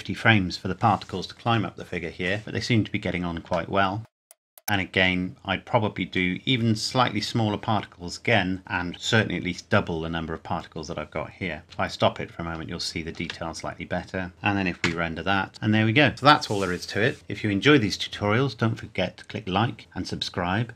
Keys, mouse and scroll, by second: 3.5 shift+Num_Lock, 3.7 shift+middle click, 4.3 scroll up 1, 4.6 middle click, 11.6 space, 14.9 F12.